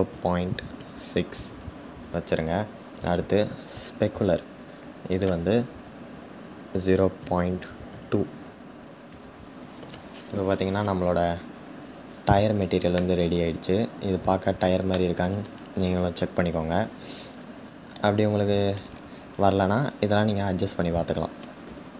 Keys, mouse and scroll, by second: 1.2 click, 8.7 click, 11.7-12.7 scroll up 4, 12.7-14.7 middle drag, 14.7-16.3 scroll down 3, 16.3-17.1 scroll down 1, 17.1-17.7 scroll down 1, 17.7-21.9 drag.